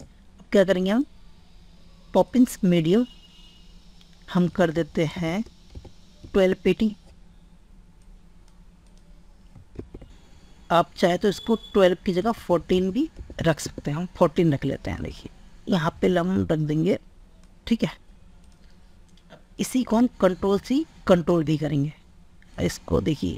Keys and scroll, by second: 4.6 ctrl+a, 9.3 ctrl+s, 12.3 ctrl+a, 20.0 ctrl+c, 21.2 ctrl+v.